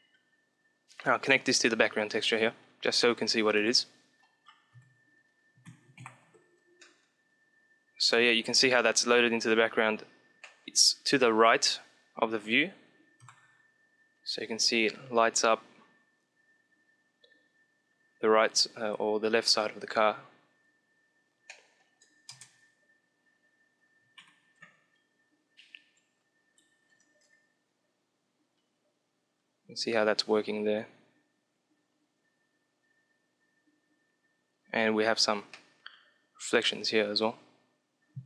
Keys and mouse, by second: 0.0 click, 1.2 click, 2.5 click, 3.6 KP_1, 4.2-6.3 middle drag, 4.6 KP_5, 5.9 ctrl+Up, 6.7-8.4 middle drag, 8.6-12.0 middle drag, 13.1 KP_7, 14.0 click, 14.7-16.5 middle drag, 21.0-23.3 middle drag, 22.1 KP_0, 24.2 ctrl+Down, 25.7-26.8 drag, 27.5 click, 34.8-37.1 middle drag.